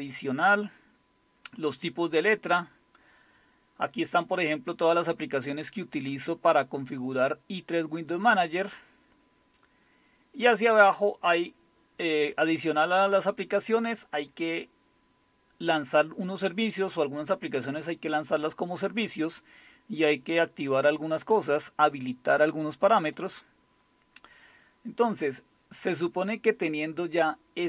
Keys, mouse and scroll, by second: 0.9-1.9 scroll down 2, 5.7-7.6 drag, 8.1 click, 9.2-9.8 scroll down 1, 9.8-11.1 scroll down 1, 11.1-11.6 scroll down 1, 11.6-12.1 scroll down 1, 19.1-19.7 scroll down 2, 19.7-20.0 scroll down 1, 22.6 click, 23.4-25.5 scroll down 4, 25.5-27.6 scroll up 2.